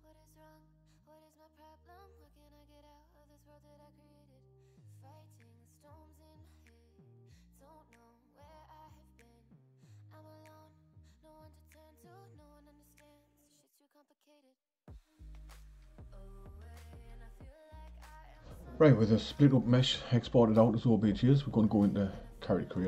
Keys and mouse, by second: 2.2 click, 3.6-6.6 drag, 10.6 click, 12.6-19.5 drag.